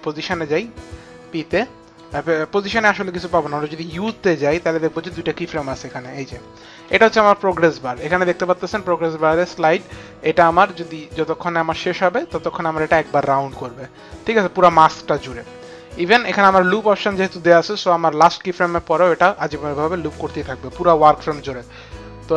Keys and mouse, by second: 1.0 click, 2.9 click, 3.8 u, 5.5 click, 9.7 click, 18.3 click.